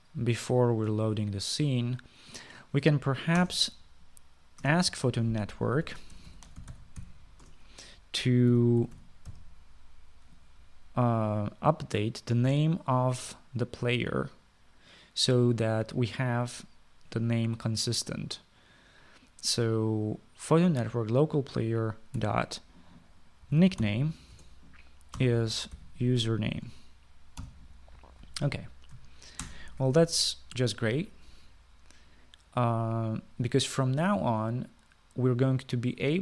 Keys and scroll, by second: 4.4 Return, 4.5 Return, 5.9 Up, 6.6-10.7 typing, 23.2 typing, 24.2-28.9 typing, 25.3 Return, 30.4 ctrl+s.